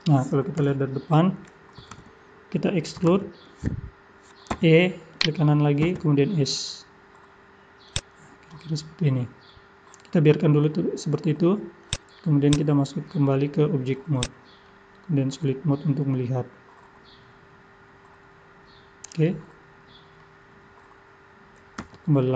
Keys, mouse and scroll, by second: 0.0 scroll down 2, 0.6 KP_1, 3.2 KP_1, 4.5 e, 5.8 s, 11.8 click, 13.1 middle click, 14.2 click, 14.7 middle click, 21.8 Tab, 22.2 middle click.